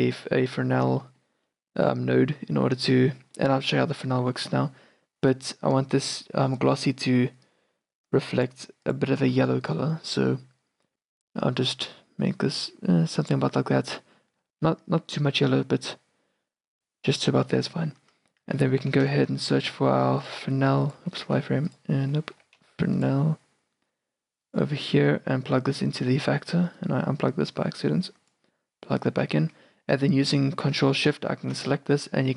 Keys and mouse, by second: 0.2-7.2 middle drag, 7.5-10.9 drag, 14.0-20.5 middle drag, 18.5 shift+a, 21.1 x, 21.4 shift+a, 25.2-29.1 drag, 29.1-31.2 middle drag, 31.2-32.3 drag.